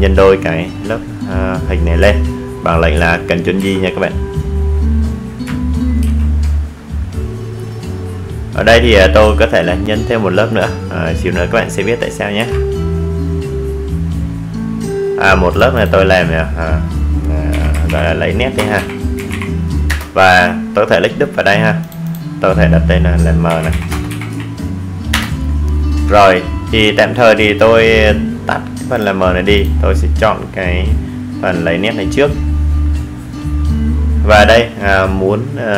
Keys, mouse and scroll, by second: 0.9 super+j, 7.5 ctrl+j, 11.7 click, 13.5-15.9 typing, 16.0 Return, 17.8 click, 19.1-20.4 typing, 21.0 Return, 24.5 click, 31.8 right click.